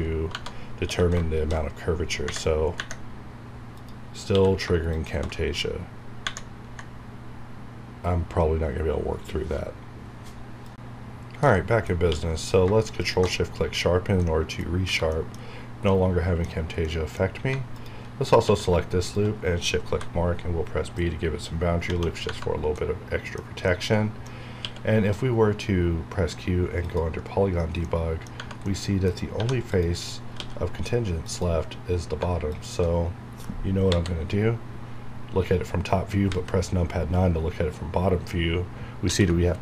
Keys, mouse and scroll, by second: 0.2 Tab, 0.6 scroll down 1, 0.8 q, 4.3 q, 4.8 ctrl+shift+click, 12.1 q, 12.9 shift+click, 13.9 scroll down 1, 14.2 middle click, 14.6 scroll down 1, 14.8 Tab, 15.1 middle click, 15.4 scroll up 1, 15.9-17.2 middle drag, 17.2 scroll up 1, 17.7 alt+click, 18.3 scroll down 1, 18.4 q, 19.0 shift+click, 19.9 b, 22.4 scroll down 1, 22.7-24.6 middle drag, 24.6 q, 26.8 click, 28.3 Tab, 28.6 middle click, 29.1 scroll up 1, 29.6 1, 33.9 KP_7, 36.3 KP_9, 39.1 ctrl+f.